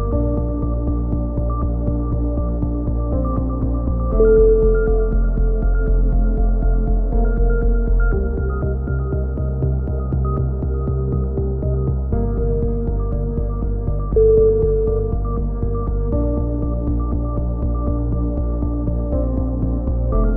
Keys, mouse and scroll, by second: 0.1 s, 1.3 click, 2.4 a, 2.5 z, 2.9 click, 3.5 click, 4.3 middle click, 5.2-7.4 drag, 7.4 middle click, 9.3 shift+q, 9.5 a, 9.9 Tab, 11.2-12.4 middle drag, 12.8 click, 14.4 middle click, 14.7 click, 16.5-17.5 drag, 17.2 Tab, 17.5 middle click, 17.9 z, 18.7 click, 19.7 middle click.